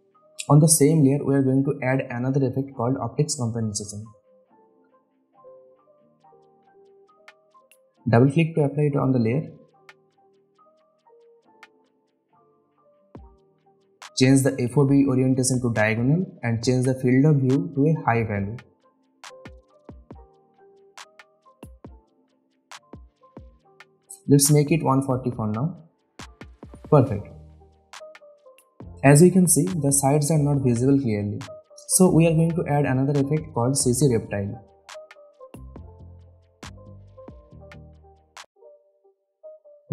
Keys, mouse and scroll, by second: 4.6-6.0 typing, 8.4 click, 13.6 click, 16.4 space, 16.4-17.0 click, 16.9 space, 18.0 click, 19.9 Return, 21.6-22.8 drag, 24.7 Return, 26.3 click, 26.9-27.4 scroll up 1, 27.4-28.0 scroll down 1, 28.0-28.9 click, 29.3-31.1 scroll up 1, 31.5 click, 35.0-36.7 typing, 37.6 click.